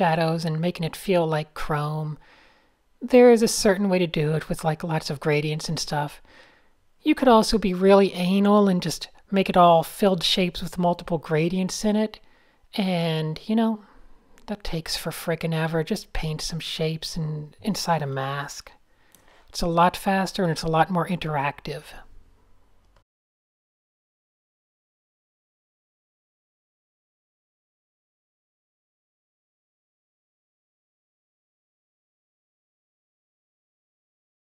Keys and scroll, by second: 1.5 super+z, 2.1 super+0, 4.3 Tab, 4.5-6.1 typing, 8.3 super+z, 8.5 Tab, 8.9 Tab, 9.0 a, 9.5 alt+super+g, 10.0 super+h, 10.4 shift+z, 11.7 Tab, 14.1 alt+shift+super+r, 14.6 alt+super+g, 19.8 shift+super+a, 20.2 n, 20.8 super+z, 21.7 super+z, 22.7 super+z, 23.3 super+z, 23.9 Tab, 25.9 super+z, 26.0 super+z, 26.6 a, 27.8 super+z, 28.0 super+space, 28.4 super+j, 28.4 super+h, 28.8-29.9 typing, 30.9 alt+shift+super+j, 31.3 a, 31.9 super+-, 32.0 super+-, 32.1 super+-, 33.3 alt+shift+super+b, 34.2-34.5 typing.